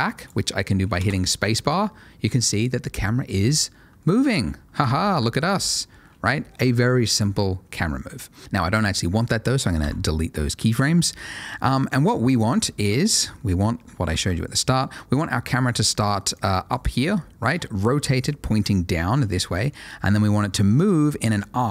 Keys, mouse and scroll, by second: 1.0 space, 5.1 shift+Left, 9.8 Delete, 10.8 middle click, 11.8-12.3 scroll down 1, 12.3 middle click, 13.0 shift+middle click, 13.3 shift+middle click, 14.1 ctrl+shift+a, 16.3 click.